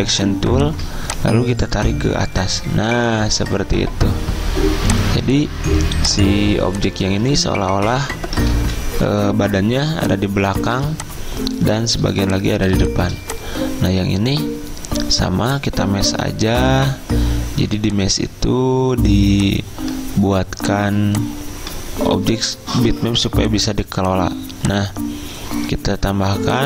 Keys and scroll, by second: 7.6 ctrl+z, 12.2 v.